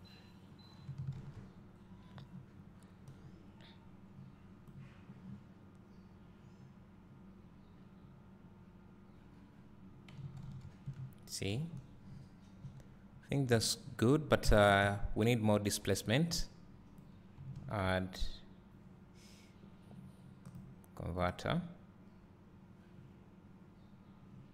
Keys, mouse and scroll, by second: 11.0 `, 12.6-13.0 scroll up 2, 14.1 `, 23.5 click.